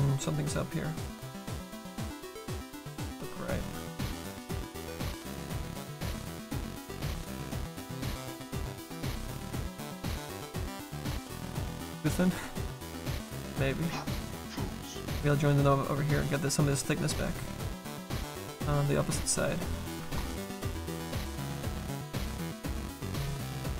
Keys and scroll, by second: 20.0 ctrl+z.